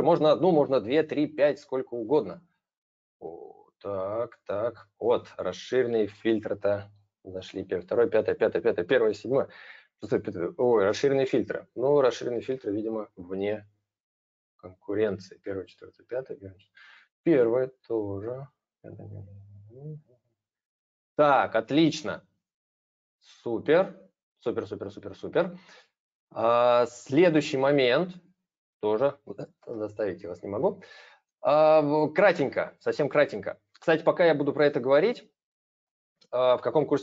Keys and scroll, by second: 29.3 ctrl+c.